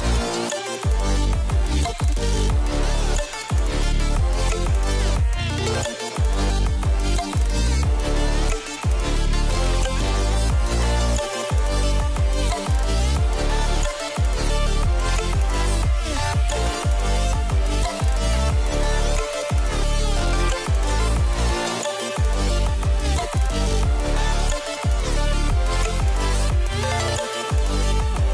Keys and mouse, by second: 1.2 click, 3.2 middle click, 3.9 middle click, 4.1 middle click, 6.1 middle click, 7.2 ctrl+s, 7.8 KP_0, 15.3 click, 15.6-16.1 middle drag, 17.0 middle drag, 17.4 click, 18.5 click, 21.1 click, 26.1 middle click, 26.7 click.